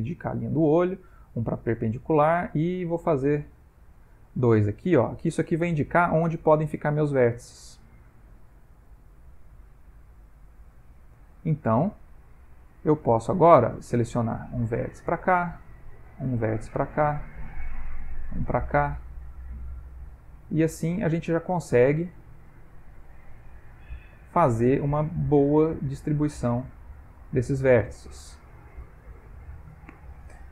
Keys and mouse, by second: 2.6 click, 3.7 click, 8.0 click, 11.0 ctrl+middle click, 12.3 Tab, 13.0 shift+middle click, 13.8 click, 14.2 g, 15.7 click, 15.8 g, 17.2 click, 17.4 g, 18.8 click, 19.0 g, 20.3 click, 20.5 g, 22.5 click, 22.9 g, 24.2 click, 24.4 g, 25.7 click, 25.9 g, 27.8 shift+middle click, 29.0 ctrl+middle click, 30.0 middle click.